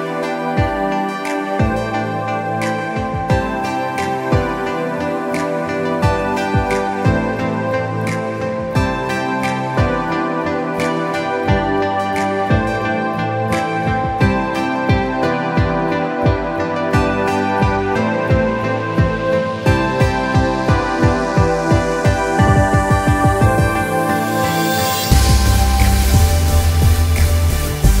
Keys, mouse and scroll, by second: 0.6 click, 1.3 z, 1.5 click, 7.8 click, 8.0 Escape, 8.2 click, 8.9 click, 9.9 Escape, 10.0 click, 10.4 click, 10.6 Escape, 10.8 click, 11.0 Escape, 11.2 click, 12.5 click, 12.7 Escape, 13.0 scroll up 1, 13.1 scroll down 1, 13.2 click, 13.7 click, 14.3 scroll up 1, 14.7-17.6 typing, 14.7 click, 15.2 click, 15.6 click, 16.2 click, 17.0 click, 17.2 click, 18.0 click, 19.0 Escape, 19.1 scroll down 1, 19.4-19.8 alt+scroll up 4, 20.0 alt+scroll down 2, 20.2 click, 20.3 typing, 20.6 click, 21.0 click, 22.6 scroll down 1, 22.7 click, 23.5 z, 23.7 alt+scroll down 1, 23.9 alt+scroll up 1, 24.2 click, 24.6 click, 25.2 alt+scroll down 2, 25.5 click, 25.8-26.2 alt+scroll up 2, 26.3 click, 27.5-28.0 alt+scroll down 2.